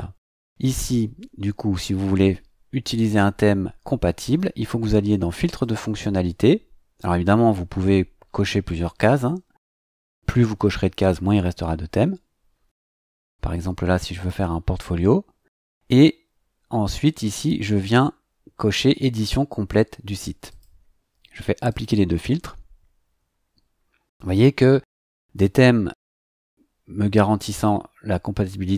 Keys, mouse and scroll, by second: 5.6 click, 14.1 click, 15.7 scroll down 1, 20.5 click, 21.6 click.